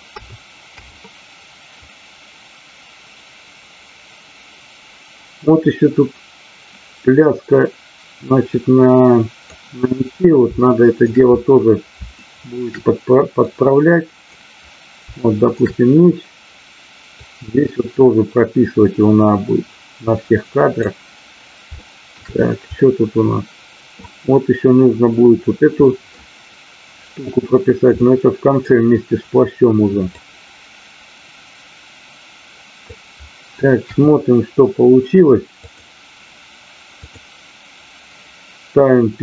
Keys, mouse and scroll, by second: 1.9-9.5 drag, 10.5-11.0 shift+middle drag, 12.1-12.5 shift+middle drag, 13.4-14.4 drag, 15.3 shift+middle click, 17.1-20.8 drag, 21.7-22.3 shift+middle drag, 22.8-23.9 middle drag, 25.7 middle click, 28.0 middle click, 30.1-32.9 drag, 33.8 KP_1, 35.6 click.